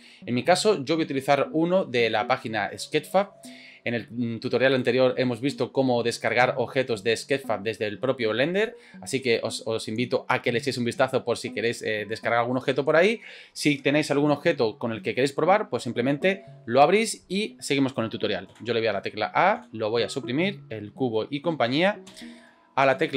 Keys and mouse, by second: 18.6 a, 19.6 Delete, 22.1 n.